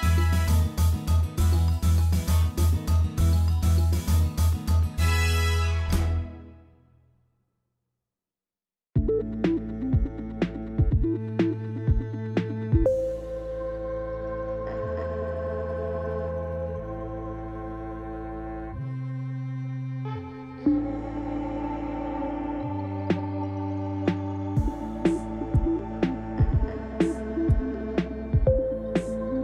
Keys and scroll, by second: 4.8 3, 6.4 i, 10.0 a, 12.5 Tab, 12.8 g, 17.6 7, 19.0 g, 22.2 Tab, 23.2 2, 24.1 o, 26.1 ctrl+b.